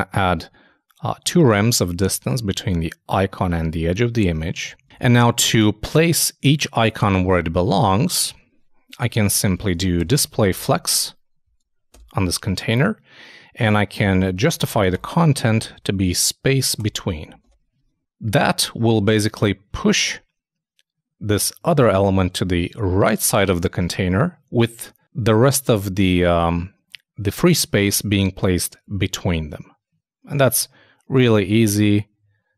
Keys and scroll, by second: 4.8 super+Tab, 8.3 super+Tab, 9.0 super+Return, 17.1 super+Return, 17.2 super+s, 17.4 super+Tab.